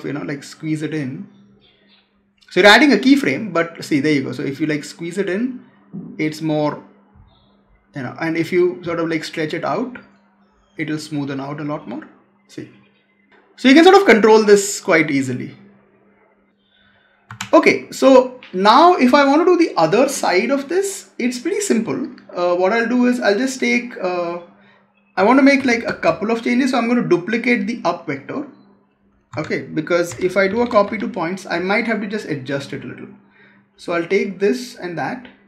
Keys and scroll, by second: 17.2 Escape, 25.4 ctrl+c, 25.8 ctrl+v, 29.2 Tab.